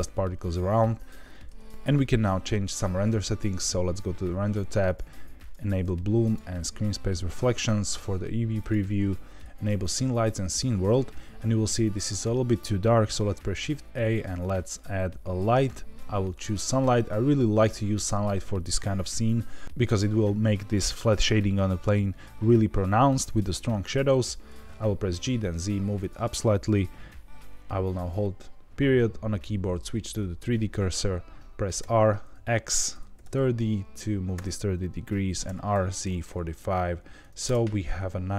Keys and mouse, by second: 1.6 ctrl+b, 3.6 click, 4.8 click, 5.3 click, 6.2 click, 6.2 right click, 8.6-10.5 drag, 13.1 shift+a, 24.5 g, 24.5 g, 24.6 z, 25.9 click, 27.3 ., 31.8 r, 32.3 x, 33.1 KP_3, 33.2 KP_0, 34.3 KP_Enter, 35.4 r, 35.7 z, 36.2 KP_4, 36.2 KP_5, 36.8 KP_Subtract, 37.4 KP_Enter.